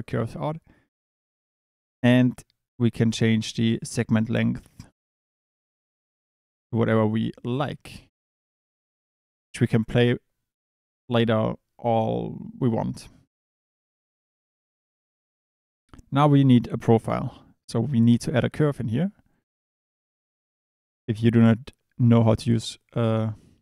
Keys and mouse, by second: 1.1 click, 3.1-7.2 drag, 7.5 click, 13.7 middle click, 16.3 click, 17.9 Escape, 19.4 click.